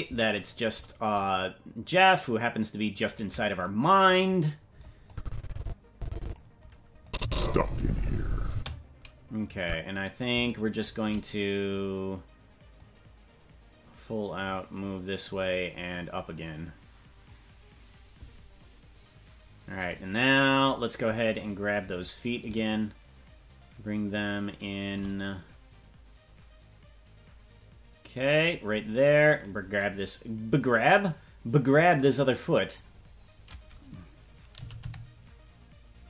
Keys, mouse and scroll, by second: 0.4 shift+right click, 1.1-3.0 drag, 5.1-6.3 drag, 7.0 click, 7.2 space, 8.5 space, 9.6 click, 10.6 shift+right click, 12.7-14.5 drag, 15.9-17.3 drag, 20.4-20.9 scroll down 4, 21.4-22.5 right drag, 22.6-24.9 shift+drag, 25.3-28.4 drag, 28.6-29.3 scroll down 3, 29.3 right click, 31.5-32.8 drag, 32.9-33.8 scroll down 2, 34.2 scroll down 1, 34.5 g.